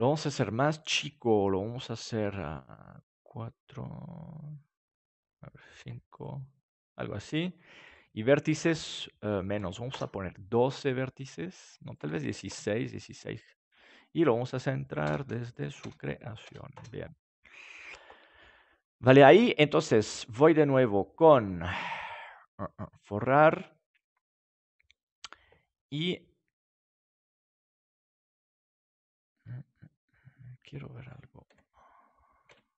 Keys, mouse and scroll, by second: 0.1-1.8 middle drag, 1.8-3.6 drag, 5.1-10.8 drag, 11.9-13.9 drag, 14.1 middle click, 14.8-18.0 drag, 20.1-21.9 drag, 31.4 s.